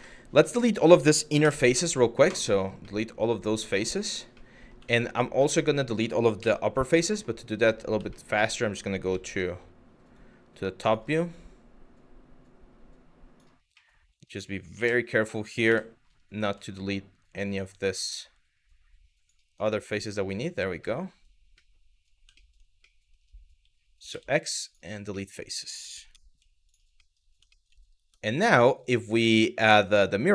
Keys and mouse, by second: 0.0 shift+middle click, 1.0 Delete, 2.6 middle click, 3.3 shift+middle click, 3.8 shift+middle click, 4.1 middle click, 4.6 shift+middle click, 5.1 middle click, 6.0 KP_7, 6.7 middle click, 7.7 middle click, 8.7 z, 9.7 click, 10.7 click, 11.0-13.1 drag, 13.5 middle click, 14.4 KP_1, 15.3 KP_7, 16.4-18.9 ctrl+drag, 19.4 middle click, 20.6 middle click, 21.3 middle click, 22.0 shift+middle click, 22.6 middle click, 23.7 x, 24.7 middle click, 25.7 z, 26.3 click, 26.6 middle click, 27.1 middle click, 27.6 Tab, 29.4 click.